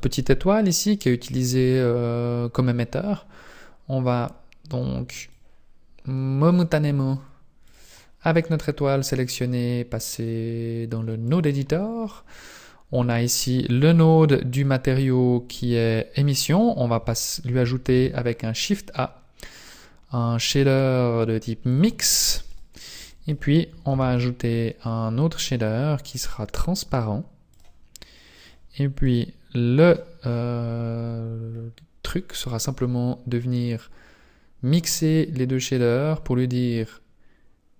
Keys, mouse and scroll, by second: 5.3 click, 5.4 click.